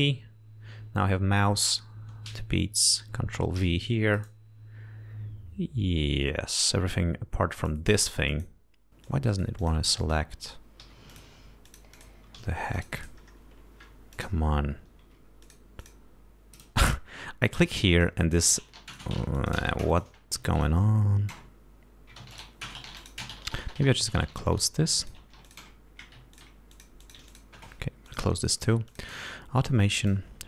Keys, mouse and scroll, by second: 0.0 ctrl+c, 3.9 ctrl+v, 7.9 click, 8.6 click, 9.3 click, 10.3 click, 11.1 g, 11.4 click, 12.0 click, 12.7 s, 13.0 click, 14.4 click, 15.7 click, 16.1 click, 17.7 click, 19.2 click, 19.7 click, 20.2 click, 20.9 ctrl+click, 22.6 ctrl+click, 23.3 ctrl+click, 24.9 click, 25.3 click, 25.8 click, 26.6 click, 27.0 click, 28.4 ctrl+click, 29.2 click.